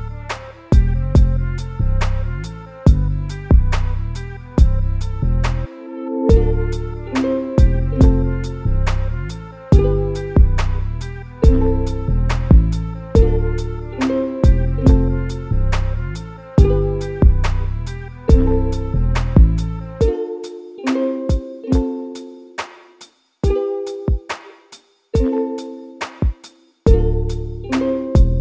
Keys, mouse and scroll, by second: 1.3 a, 1.4 a, 1.7 click, 2.2 g, 5.0 a, 5.3 a, 6.0-6.4 scroll up 2, 6.5-9.6 shift+middle drag, 12.4 Tab, 13.0 shift+d, 15.5 Tab, 16.3 a, 16.8 s, 23.9-24.3 scroll down 3, 24.3 Tab, 24.6 click, 24.9-25.4 scroll up 1, 25.8 g, 27.0 click, 27.6 g.